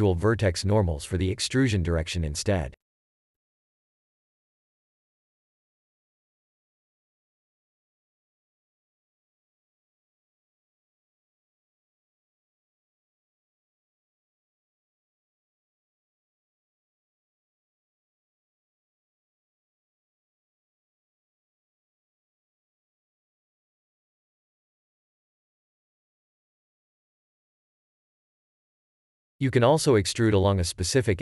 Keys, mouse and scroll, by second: 2.0 n, 4.9 scroll down 1, 7.9 a, 11.2 x, 12.4 x, 17.7 ctrl+click, 19.6 w, 20.9 click, 21.2 3, 22.9 click, 24.3 shift+e.